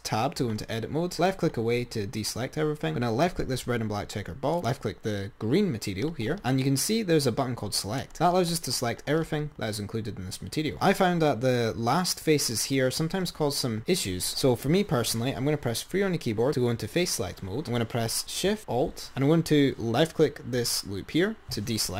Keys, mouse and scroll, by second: 0.0 Tab, 1.3 click, 3.0 click, 4.9 click, 8.0-10.2 drag, 10.2-11.6 scroll up 15, 11.6 scroll up 1, 14.3 3, 17.4 click, 20.8 ctrl+alt+shift+click.